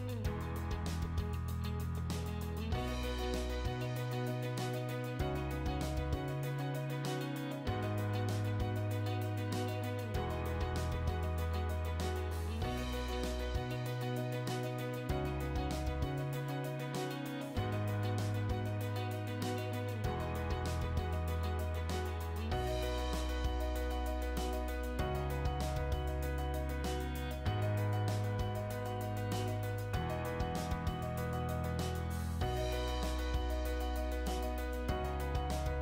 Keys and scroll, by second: 3.3 2, 3.5 Return, 4.5-6.1 typing, 6.2 Return, 7.7-10.5 typing, 9.0 Return, 11.0 Return, 11.9-16.7 typing, 15.4 Return, 16.9 Return, 18.1-19.1 typing, 19.4 Return, 21.2 Escape, 24.1 t, 24.5 space, 25.8 Escape, 26.3 t, 26.7 space, 30.1 Escape, 31.4 Delete.